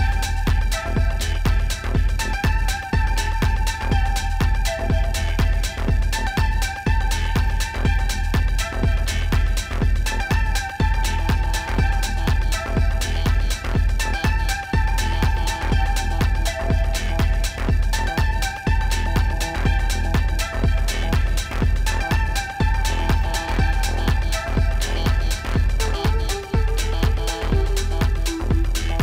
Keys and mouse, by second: 2.6 click, 5.6 click, 8.9 click, 10.6 click, 13.0 click, 18.2 click, 26.1 click.